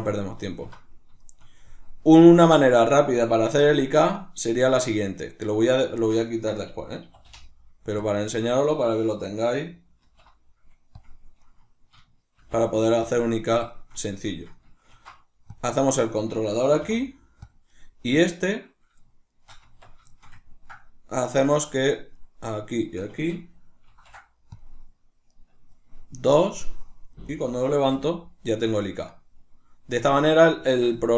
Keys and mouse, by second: 3.5 Tab, 4.2 right click, 4.9 right click, 5.1 right click, 5.5 right click, 6.0-8.1 ctrl+shift+middle drag, 7.1 e, 8.1 click, 8.3 right click, 10.1 alt+p, 11.4 right click, 12.4 shift+n, 13.7-15.6 shift+middle drag, 14.9 ctrl+alt+s, 15.6 click, 15.8 right click, 16.6 g, 17.5 click, 17.7 right click, 19.3 shift+right click, 19.6 Tab, 20.1-22.2 ctrl+shift+middle drag, 22.2 right click, 22.7 shift+right click, 23.9 ctrl+shift+c, 25.3-27.3 right drag, 27.9 g, 30.2 right click, 30.7 ctrl+middle click.